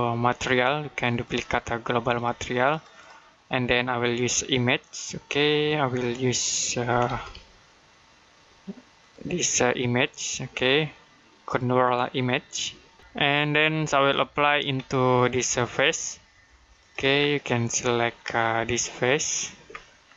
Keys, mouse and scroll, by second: 0.9 click, 6.4-7.7 typing, 8.8 click, 14.0 middle click, 14.6-15.2 scroll up 1, 15.7 ctrl+click, 17.0 scroll down 1, 17.2 middle click, 17.7-18.4 scroll up 1, 19.0 ctrl+click, 19.6 middle click.